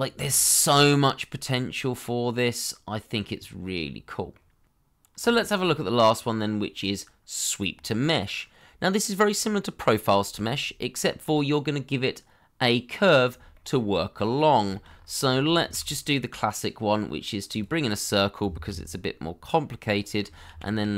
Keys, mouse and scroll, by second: 0.0 scroll down 1, 0.2 middle click, 5.2 shift+middle click, 9.5 middle click, 10.3 shift+middle click, 13.5 shift+middle click, 14.1 middle click, 14.7 shift+middle click, 14.9-15.2 scroll up 1, 15.6 shift+a, 17.9-18.5 scroll down 1, 18.6 s, 19.8 middle click, 20.4 shift+a.